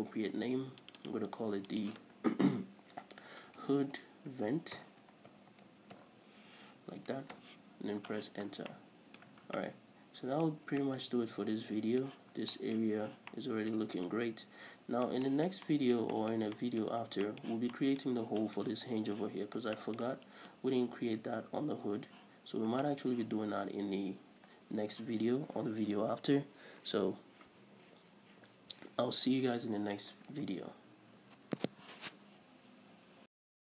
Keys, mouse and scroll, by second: 0.5-1.3 scroll up 2, 1.3 click, 4.0-9.1 drag, 4.0 BackSpace, 7.9 Return, 8.9 scroll down 1, 9.1-33.8 middle drag, 9.7 a, 9.9 scroll down 1, 10.9-11.3 scroll up 1, 12.8 scroll down 2, 14.2-14.5 scroll up 2, 17.3-17.7 scroll up 2, 18.5-18.9 scroll up 2, 19.8-20.2 scroll up 2, 22.9-23.3 scroll up 2, 30.7-31.2 scroll down 2, 31.2-32.4 scroll down 1, 32.4-33.8 scroll down 1.